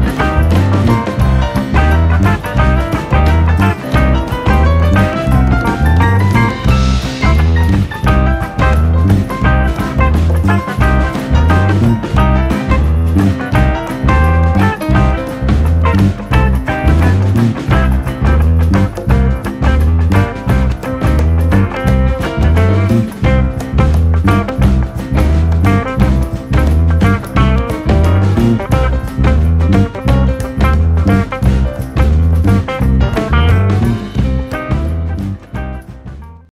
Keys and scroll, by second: 17.6-18.8 typing.